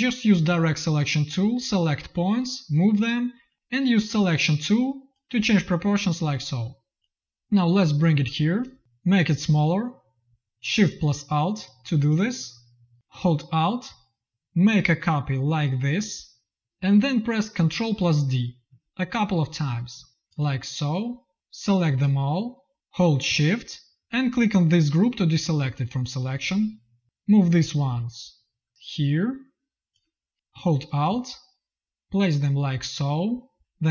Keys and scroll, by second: 7.2 v, 12.9 v, 18.2 ctrl+d, 20.2 space, 20.3 v.